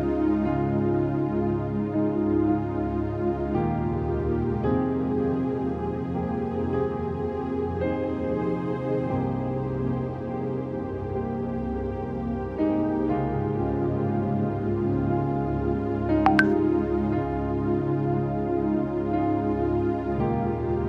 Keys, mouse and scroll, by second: 1.1 typing, 1.6 click, 5.0 typing, 5.5 click, 6.3 scroll, 6.3-6.8 scroll down 1, 6.8 click, 8.7 ctrl+d, 9.3-11.4 typing, 9.4 click, 10.0 scroll down 1, 10.8 click, 11.1 scroll down 1, 11.3 click, 14.5 click, 16.2 ctrl+click, 17.3 ctrl+d, 17.8 F5, 18.3 ctrl+t, 18.8 right click, 19.6-20.8 drag.